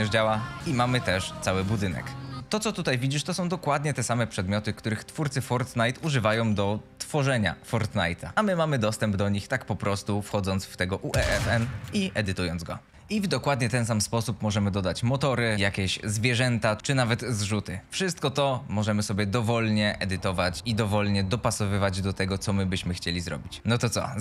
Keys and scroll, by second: 1.7-6.8 typing, 12.9 Escape.